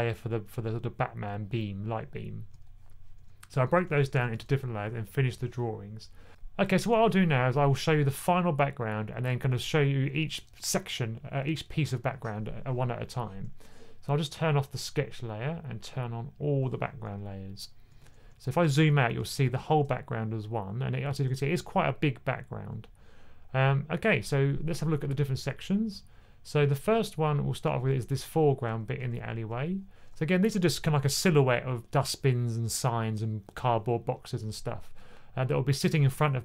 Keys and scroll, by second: 3.5 1, 3.8 1, 3.9 1, 4.1 1, 17.8-23.9 typing, 28.7 2, 28.8 2, 29.0 2.